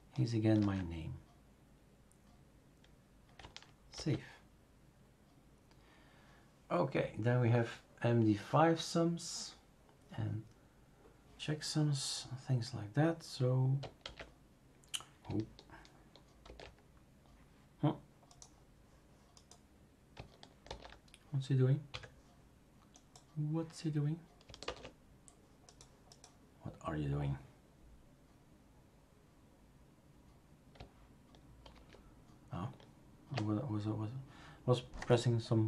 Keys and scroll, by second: 0.6 ctrl+v, 3.9 ctrl+s, 14.0 super+x, 16.4 super+f, 20.7 super+f, 21.9 Escape, 24.6 alt+Tab, 31.7 super+f.